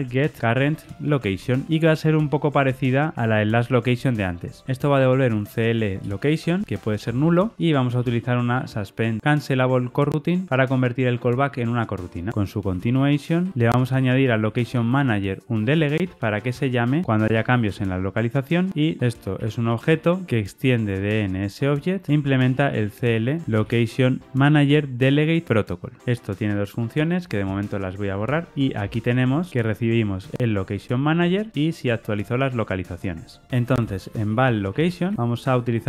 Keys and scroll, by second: 4.6 ctrl+shift+Left, 5.9 Return, 10.4 Return, 15.6 Return, 16.6 Return, 17.6 Return, 24.6 Tab, 28.8 alt+Return.